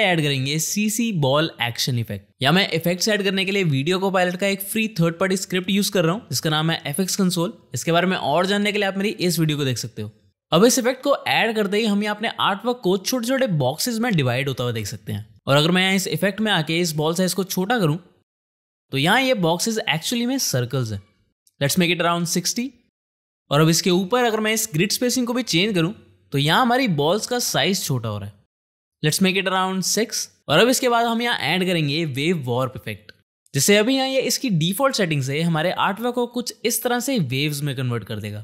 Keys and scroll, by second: 0.3 space, 0.6 shift+b, 1.2 space, 13.1 space, 22.5 KP_6, 23.2 Return, 27.8 shift+/, 31.3 ctrl+space, 31.8-32.9 typing, 36.7 space.